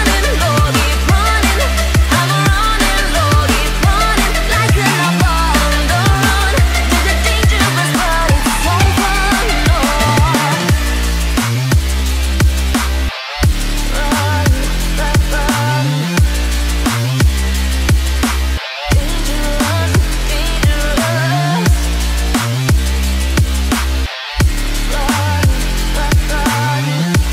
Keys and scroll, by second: 25.1 t.